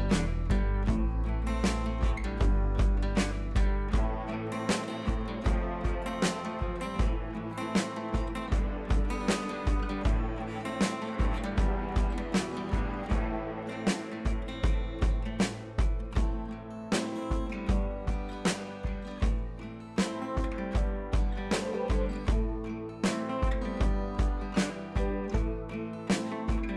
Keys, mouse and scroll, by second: 1.1 click, 1.5 shift+click, 1.8 Down, 5.6 click, 7.3 click, 8.9 ctrl+c, 9.0 click, 9.9 t, 10.0 click, 10.6 ctrl+v, 11.1-12.6 drag, 13.9 click, 16.2-17.2 scroll up 1, 18.1-19.9 scroll down 1, 20.3 scroll down 1, 25.5 click.